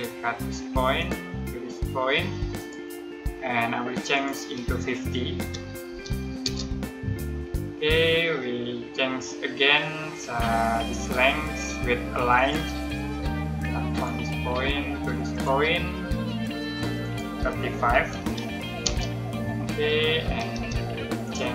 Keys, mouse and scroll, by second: 0.9 click, 5.1-6.3 typing, 6.3 Return, 12.3 click, 17.8 typing, 18.7 Return, 20.4 space, 21.1 click.